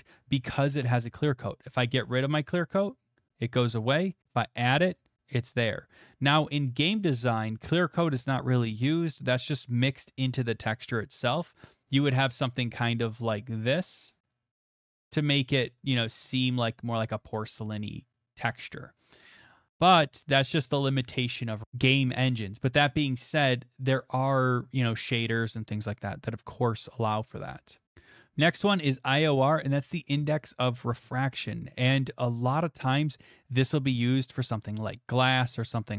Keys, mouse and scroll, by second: 4.9-10.0 drag, 12.2 click, 15.5 click, 17.3 middle click, 17.4 middle click, 19.0 middle click, 20.0 click, 24.5-29.8 drag, 29.8-31.0 middle drag.